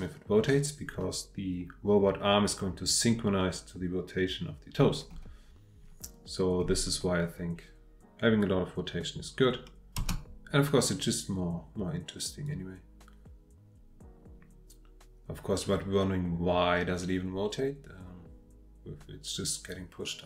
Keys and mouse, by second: 10.0 space, 12.4-20.2 drag.